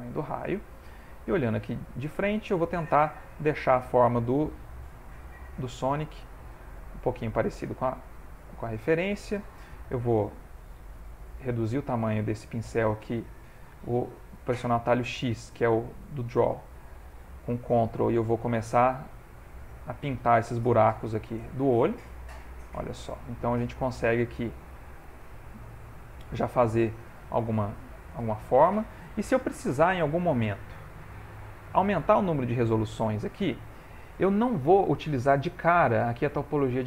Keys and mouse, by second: 1.4 click, 3.4 shift+middle click, 4.9 click, 6.2 click, 7.2 click, 7.6 click, 9.7 click, 10.8 f, 16.3 x, 16.8 ctrl+click, 23.6 ctrl+click, 24.2 click, 28.8 ctrl+middle click, 29.4 shift+middle click, 29.9 middle click, 33.4 shift+middle click, 33.7 shift+middle click.